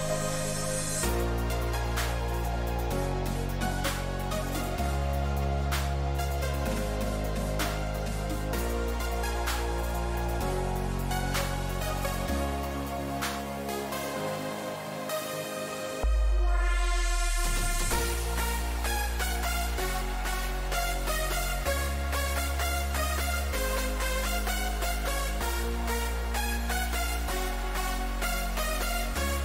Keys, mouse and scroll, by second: 0.4 Tab, 1.8-3.8 drag, 2.6 z, 3.6-8.7 middle drag, 5.8 z, 6.4 z, 6.9 z, 8.7 z, 9.1 z, 9.8-16.7 middle drag, 22.7-24.2 middle drag, 24.2-26.2 drag, 24.8 a, 25.0 a, 26.2-28.5 middle drag, 28.5-29.4 right drag.